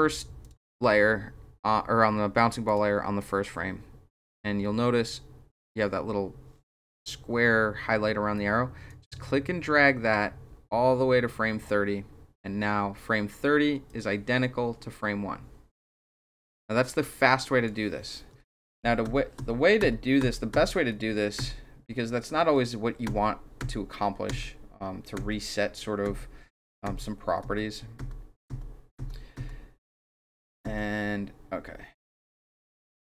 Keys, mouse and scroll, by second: 0.4 click, 2.6 click, 8.9-11.7 drag, 13.9-17.6 drag, 18.5 ctrl+z, 19.0 ctrl+z, 19.8 ctrl+z, 20.2 ctrl+z, 20.6 ctrl+z, 20.9 ctrl+z, 21.4 ctrl+z, 23.1 ctrl+z, 23.7 ctrl+z, 24.3 ctrl+z, 25.3 ctrl+z, 26.0 ctrl+z, 26.9 ctrl+z, 27.4 ctrl+z, 28.0 ctrl+z, 28.5 ctrl+z, 29.0 ctrl+z, 29.3 ctrl+z, 30.6 ctrl+z.